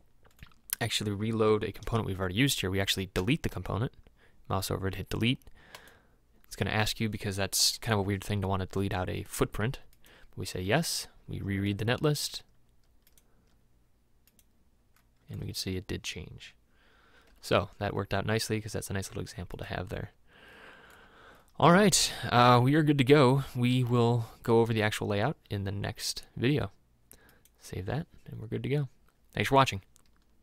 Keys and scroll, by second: 3.3 Delete, 17.3 m.